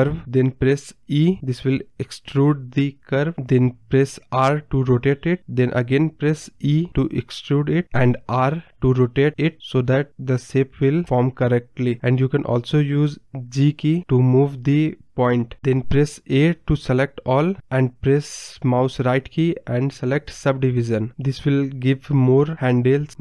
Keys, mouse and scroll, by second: 0.0 n, 0.2 e, 2.1 r, 4.2 r, 5.9 e, 7.6 r, 9.4 scroll down 2, 9.6-10.1 scroll up 1, 17.4 a, 18.7-20.7 right drag, 20.7-22.5 drag, 22.5 Tab.